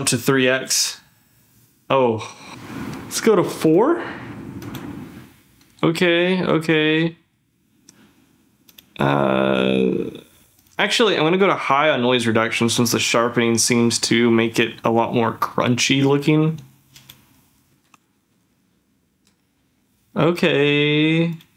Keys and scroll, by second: 17.9 ctrl+f, 20.1 ctrl+f.